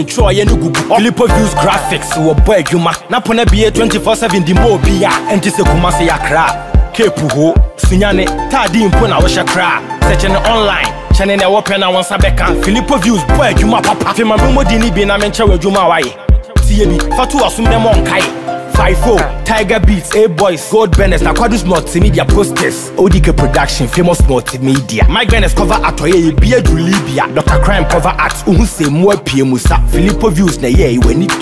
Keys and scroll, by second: 11.3 ctrl+j, 13.2 ctrl+t, 18.4 Return, 28.1 ctrl+t.